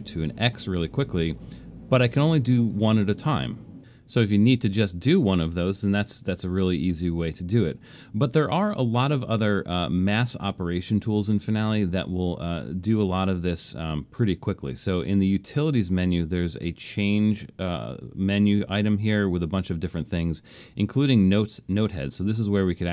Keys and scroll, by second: 7.3 super+z.